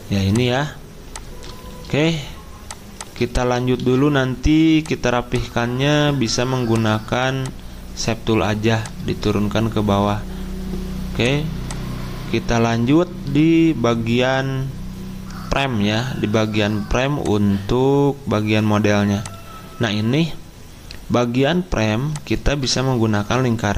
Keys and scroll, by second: 3.7 c.